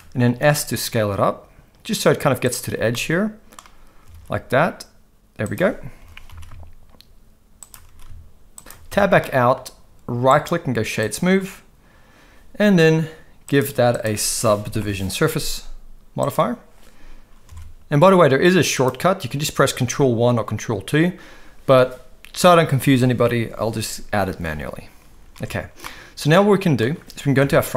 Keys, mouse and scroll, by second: 0.2 s, 2.9 middle click, 4.1 alt+s, 6.0 g, 7.8 s, 8.9 Tab, 9.2 middle click, 10.4-11.2 right drag, 13.5-16.4 drag, 17.5 alt+a, 18.7 click, 25.3 alt+a, 25.8 middle click, 27.4 KP_1.